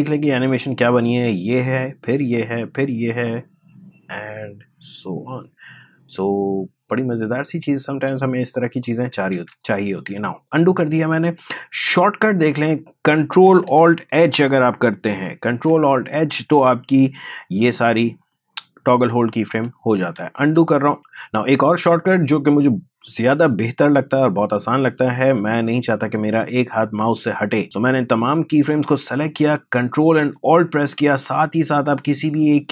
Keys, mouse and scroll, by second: 7.9 space, 9.3 ctrl+z, 11.8-15.1 drag, 15.1 ctrl+alt+h, 16.4 space, 19.4 space, 20.2 ctrl+z, 21.0-22.4 drag, 27.6-32.7 drag.